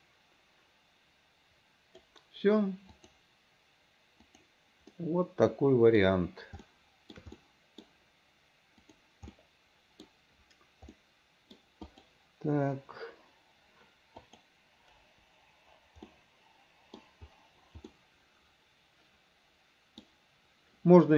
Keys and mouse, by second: 3.1-4.6 middle drag, 5.1-6.1 middle drag, 6.8 shift+middle click, 7.5 middle click, 9.0 click, 9.5 middle click, 11.1 middle click, 12.1 click, 14.4 click, 15.1 Delete, 16.2 middle click, 18.0-20.1 middle drag.